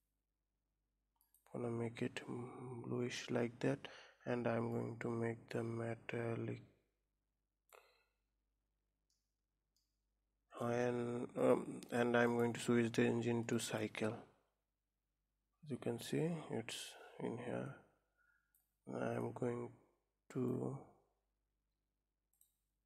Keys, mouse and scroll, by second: 4.6-8.4 drag, 8.4-8.9 scroll up 2, 9.1-13.5 middle drag, 13.5-15.2 drag, 17.5-22.0 drag, 22.1 click.